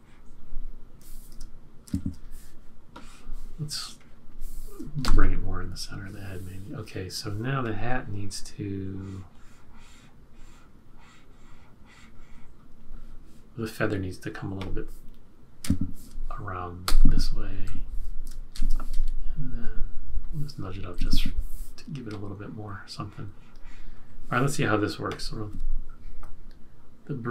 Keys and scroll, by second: 1.8 shift+F6, 5.0 shift+Left, 15.6 F6, 16.8 F6, 16.8 shift+Right, 18.5 shift+Left, 20.9 Right, 21.0 Right, 21.1 Right.